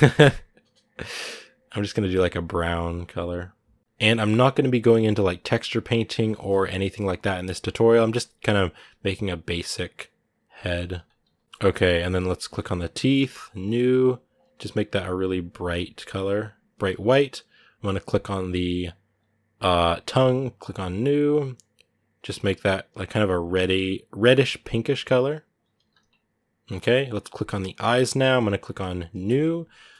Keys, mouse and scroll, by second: 11.4 middle click, 11.4-12.0 scroll up 1, 12.3 right click, 12.8 shift+middle click, 13.5-15.1 drag, 18.9-20.5 right drag, 20.5 click, 27.4 right click, 27.8-29.0 shift+middle drag, 29.0-29.9 drag.